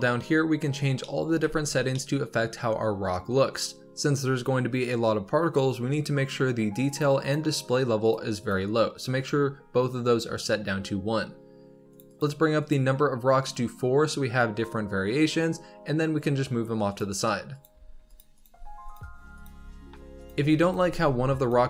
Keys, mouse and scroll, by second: 0.8 scroll down 1, 0.9-1.4 middle drag, 1.4 z, 1.8-5.0 middle drag, 6.8-11.4 drag, 11.8-13.4 drag, 13.4-15.7 middle drag, 15.7-16.1 scroll down 4, 16.8 click, 17.6 g, 18.3 click, 18.4 g, 19.3 click, 19.4 g, 20.5 click, 20.7 x, 21.3 click.